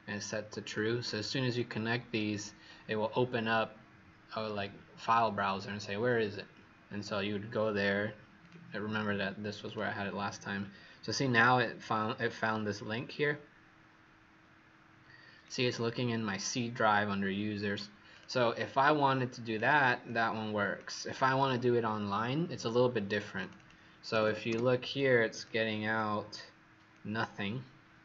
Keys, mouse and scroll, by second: 18.5 click, 20.0 click, 23.5 click, 24.0 /, 24.2 /, 24.4 Return, 24.9 click, 25.9 click.